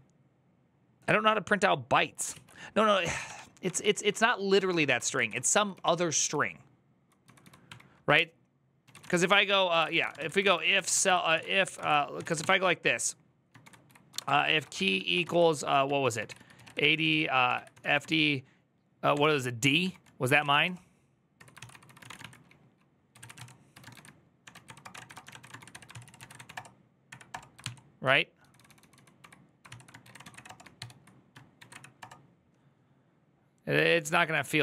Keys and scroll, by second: 2.2 alt+{, 3.0 ctrl+d, 3.4 ctrl+d, 4.6 ctrl+d, 4.7-25.7 typing.